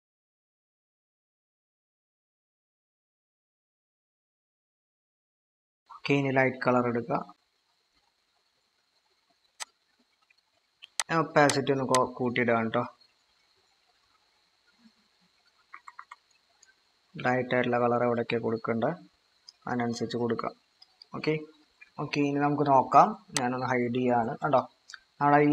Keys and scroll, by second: 15.8-16.1 typing, 21.6 typing, 22.2 ctrl+-.